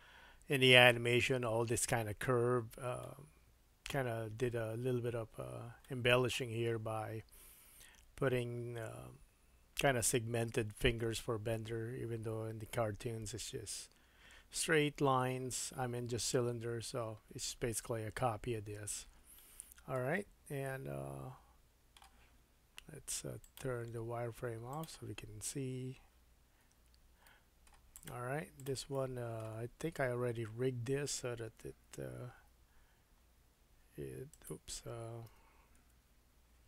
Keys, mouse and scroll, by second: 3.0-8.9 middle drag, 19.4-23.4 shift+middle drag, 23.4-28.1 drag, 25.2-25.7 scroll down 1, 25.8 scroll down 1, 26.6 Tab, 27.2 middle click, 28.1 middle click, 28.6 click, 28.7-36.6 middle drag, 29.7-30.3 scroll up 2, 30.3-30.8 scroll up 1, 32.4 r, 35.3 r.